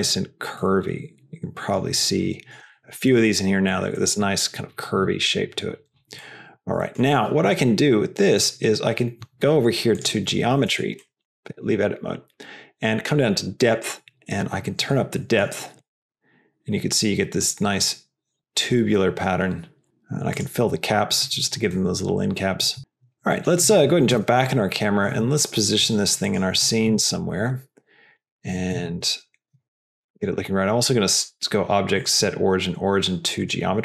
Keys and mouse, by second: 0.5 middle click, 0.6 click, 0.7 middle click, 0.7 click, 0.9 middle click, 0.9 click, 1.1 middle click, 2.1 middle click, 2.6 shift+middle click, 3.6 middle click, 6.1 click, 6.3 middle click, 6.7 middle click, 8.3 click, 9.9 click, 10.6 Tab, 10.9 middle click, 11.3 shift+middle click, 13.7-15.4 drag, 15.8-19.8 shift+drag, 21.6 middle click, 23.2 middle click, 24.2 KP_0, 25.0 g, 26.8 g, 28.6 s, 29.8 g, 31.0-33.6 drag.